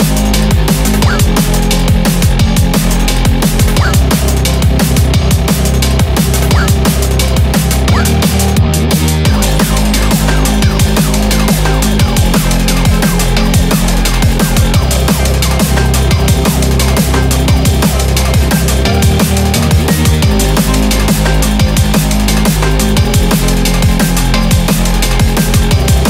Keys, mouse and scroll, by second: 0.4 KP_0, 2.5 KP_Enter, 3.6 KP_0, 4.0 KP_1, 4.8 KP_Enter, 7.6 KP_Enter, 9.7 KP_0, 14.6-15.2 scroll down 4, 16.3 click, 18.0 shift+d.